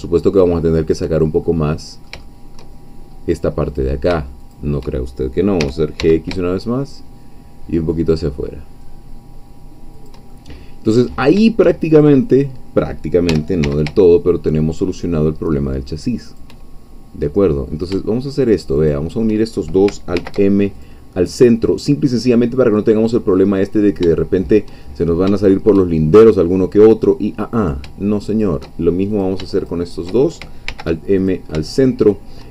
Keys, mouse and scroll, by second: 0.8 shift+click, 1.5-2.7 shift+middle drag, 2.9-3.7 shift+scroll up 3, 3.7 click, 4.5 shift+click, 5.6 g, 6.0 x, 9.9 shift+click, 10.3 shift+middle click, 11.9 shift+click, 13.3 g, 13.7 x, 16.3 shift+click, 18.9 shift+click, 20.1 alt+m, 20.8 alt+click, 21.5 scroll down 1, 21.9-23.4 middle drag, 23.4-24.0 scroll up 1, 24.2 shift+middle click, 24.8-25.2 shift+scroll up 1, 25.4 shift+middle click, 26.1 shift+scroll up 1, 27.7 shift+click, 29.1 shift+click, 29.5 shift+click, 30.7 alt+m, 31.2 alt+click, 31.7-32.5 alt+shift+middle drag.